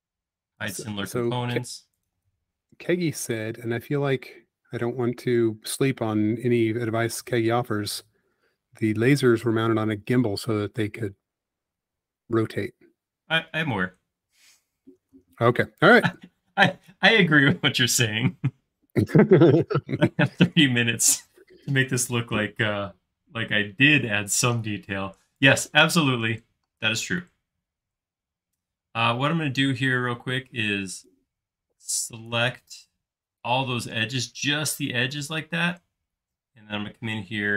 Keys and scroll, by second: 3.7 BackSpace, 4.8 e, 8.3 space.